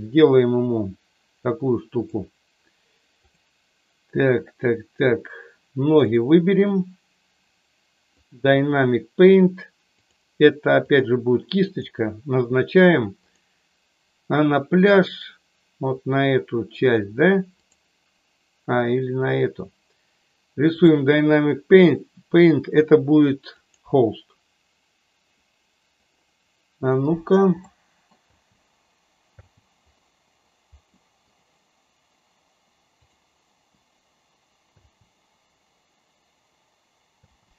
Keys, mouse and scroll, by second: 5.9 click, 10.1-11.1 drag, 23.6 click, 27.5-28.0 middle drag, 28.3 space, 29.4 space, 30.9 middle click, 33.8 click, 34.8 space, 37.4 space.